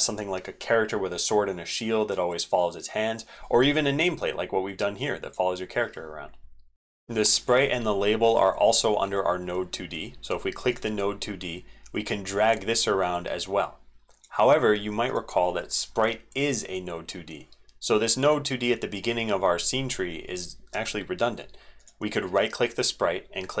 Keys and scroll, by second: 6.7 ctrl+z, 6.7 ctrl+v, 6.7 ctrl+x.